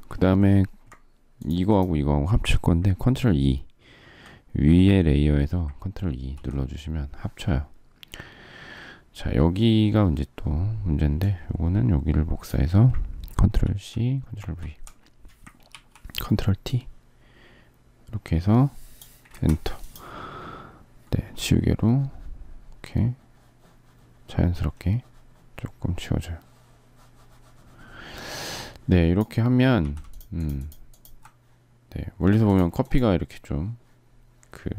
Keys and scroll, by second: 5.7 ctrl+e, 13.4 ctrl+c, 14.1 ctrl+v, 15.4 ctrl+t, 19.0 Return, 29.5 z.